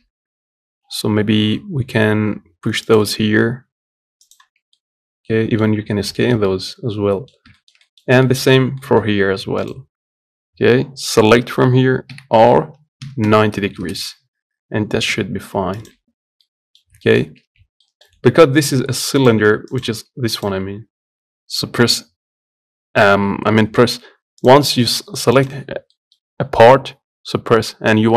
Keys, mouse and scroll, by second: 4.5-5.5 middle drag, 5.5-5.9 scroll up 1, 5.9-8.2 shift+middle drag, 8.2-8.5 scroll up 2, 8.5 middle click, 9.0 Tab, 16.1-17.3 middle drag, 17.3 Tab, 17.6 middle click, 17.8 a, 19.0 click, 19.5 click, 19.7 Tab, 24.4 middle click, 25.2 click, 25.6-28.1 middle drag.